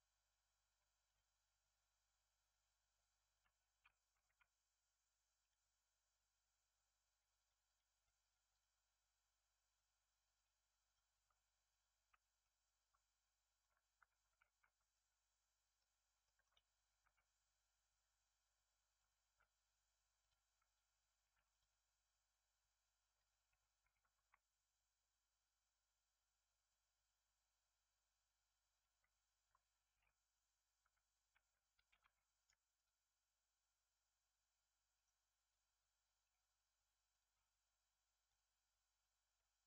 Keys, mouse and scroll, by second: 1.1-7.2 drag, 7.3 click, 7.6 click, 7.9 click, 8.2 click, 8.4 click, 10.3-12.1 drag, 12.1 Tab, 12.4-13.9 middle drag, 13.9 3, 14.4 alt+z, 14.9 click, 16.0 scroll down 2, 16.2 shift+middle click, 17.0 e, 19.2 x, 21.2 ctrl+r, 23.5 Tab, 24.1 shift+a, 30.8 r, 32.7 click, 34.9 click, 36.2-37.1 drag, 39.3-39.6 middle drag.